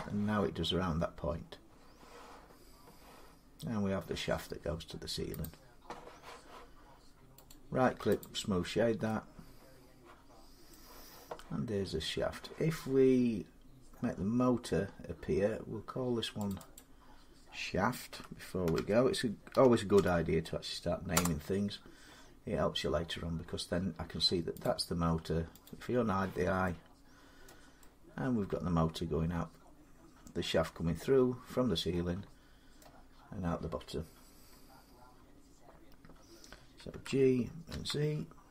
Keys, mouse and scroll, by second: 5.2 click, 7.3 right click, 8.0 click, 8.6 scroll, 8.7 scroll down 3, 10.5 middle click, 12.7-13.6 scroll down 3, 14.3-14.9 scroll up 3, 14.9-15.5 scroll up 2, 16.3 click, 16.5 click, 17.9-19.7 typing, 20.9 Return, 22.1 middle click, 22.2 middle click, 22.3 middle click, 24.4 click, 25.4 click, 26.7 scroll, 27.3 middle click, 30.9-32.3 middle drag, 32.6-37.5 middle drag, 36.7-37.5 typing.